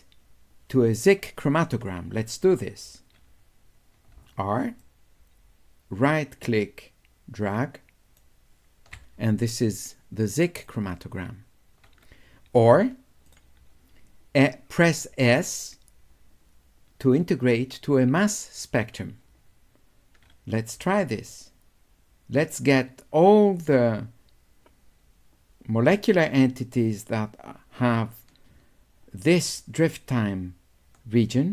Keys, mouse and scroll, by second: 4.2 w, 4.8-8.2 drag, 10.6 click, 13.3 click, 15.4-17.3 drag, 20.9 w, 21.3-31.5 drag.